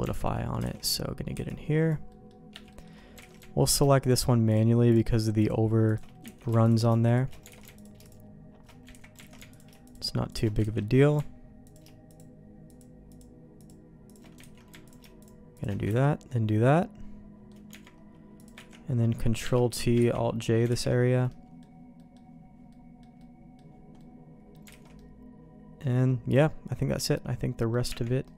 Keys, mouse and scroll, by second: 0.0 Tab, 0.0 q, 0.3 middle click, 0.7 alt+a, 2.7 middle click, 2.7 c, 3.2 alt+a, 4.0 alt+shift+click, 4.9 alt+shift+click, 5.8 alt+shift+click, 6.2 ctrl+x, 6.6 alt+click, 7.5 alt+a, 7.7 alt+click, 8.9 ctrl+z, 9.2 alt+a, 9.5 alt+click, 10.6 ctrl+x, 10.8 middle click, 12.7 alt+shift+click, 13.1 alt+shift+click, 14.4 ctrl+x, 14.8 alt+click, 15.6 alt+shift+click, 15.9 ctrl+x, 16.4-17.5 middle drag, 17.7 Tab, 18.4 click, 18.7 ctrl+r, 20.1 ctrl+t, 20.7 alt+j, 21.3 middle click, 22.7 middle click, 23.2 middle click, 24.0 middle click, 24.7 alt+a, 24.9-27.7 middle drag, 27.9 Tab, 28.2 middle click.